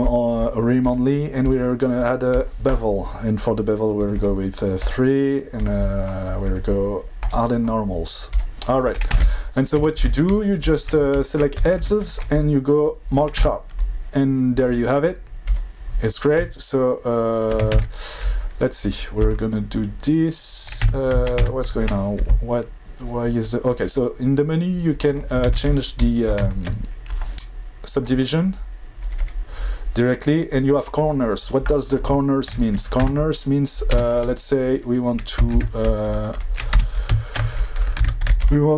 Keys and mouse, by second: 1.5-2.4 drag, 4.1 click, 4.8 click, 6.4 drag, 7.2 click, 8.3 click, 9.3 Tab, 9.7 2, 10.0 click, 10.3 alt+click, 10.6 alt+click, 11.1 alt+click, 11.7 ctrl+e, 13.4 Tab, 15.4 click, 16.5-17.5 shift+drag, 17.7 ctrl+z, 20.9 Tab, 21.4 Tab, 23.8 click, 25.0 click, 25.0 click, 25.4 alt+v, 27.9 click, 28.1 click, 29.0 click, 29.1 click, 33.1 Tab, 33.9 2, 34.1 click, 34.4 alt+click, 34.7 alt+click, 35.5 ctrl+e, 36.7 2, 36.9 click, 37.5 ctrl+click, 37.9 ctrl+e.